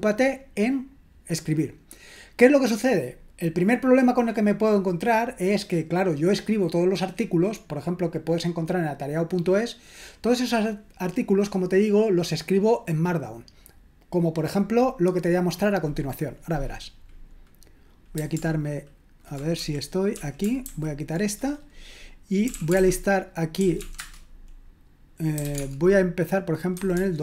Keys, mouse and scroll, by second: 19.6 super+l, 20.2 super+l, 20.7 shift+super+h, 22.2-27.2 typing.